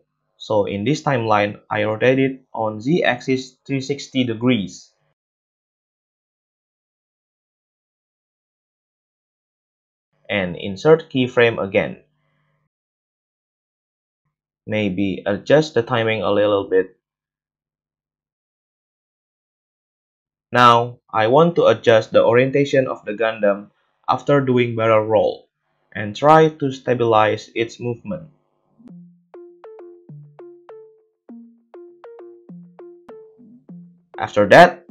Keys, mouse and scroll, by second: 0.6 middle click, 0.6-10.1 drag, 10.1-12.3 middle drag, 12.3-15.2 drag, 12.3 space, 12.9 a, 13.0 a, 13.2 middle click, 13.2 right click, 13.7 g, 15.2-15.5 middle drag, 15.5-16.1 drag, 16.1 space, 19.1 space, 19.1 click, 19.1-21.6 middle drag, 21.6-24.5 drag, 24.5-27.0 middle drag, 27.0-28.4 drag, 27.4 r, 28.4-34.9 middle drag, 30.1 a, 30.3 a, 31.4 KP_7.